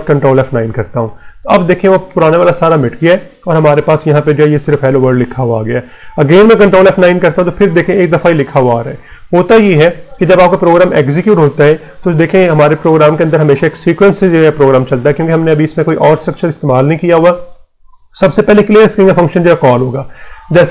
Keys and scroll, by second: 0.2 ctrl+F9, 5.3 Return, 6.4 ctrl+F9, 9.0 Return.